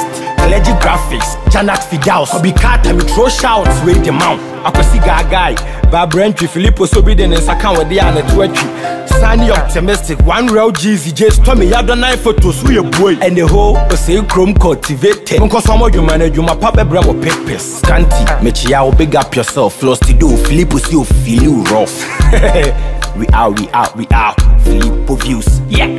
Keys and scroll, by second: 16.6 Escape.